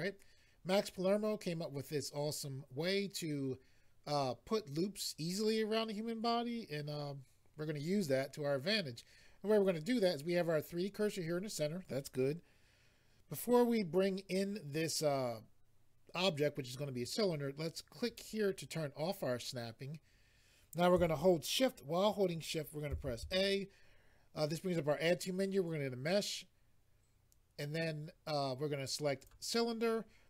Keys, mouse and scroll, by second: 18.0 click, 29.2 click.